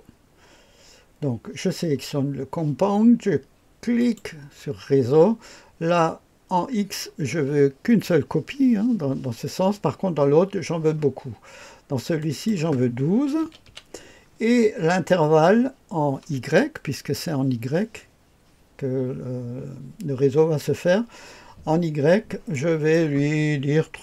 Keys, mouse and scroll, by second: 4.0 click, 6.2-12.2 scroll down 1, 12.2 click, 13.4 KP_1, 13.6 KP_2, 22.5 click, 23.9 KP_3.